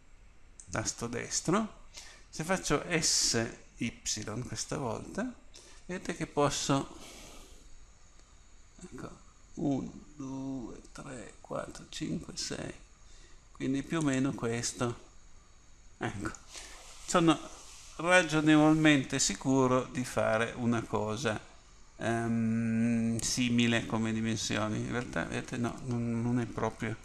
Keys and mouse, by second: 4.1 s.